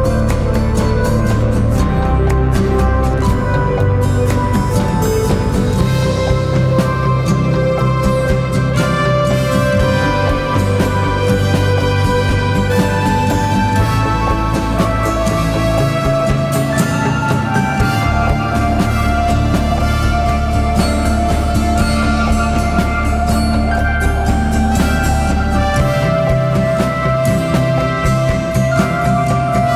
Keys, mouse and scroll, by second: 1.6-2.2 typing, 5.7 double click, 25.3 double click.